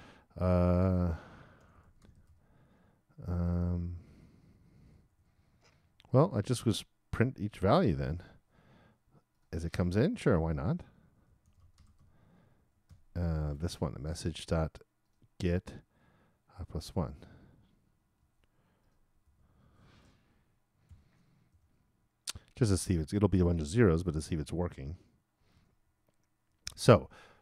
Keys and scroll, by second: 12.5-13.4 typing, 18.2 super+c, 19.2 super+v, 20.9 shift+0, 21.5 shift+;, 25.5 super+s.